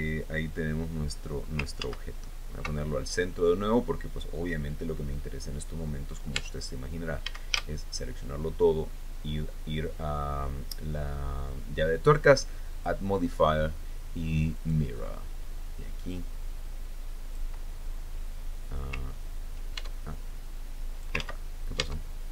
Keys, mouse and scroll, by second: 2.4 ctrl+z, 7.0 Tab, 7.9 a, 13.3 click, 15.1 click, 16.7-18.1 drag, 20.4 ctrl+Tab, 21.1 click, 21.8 ctrl+z.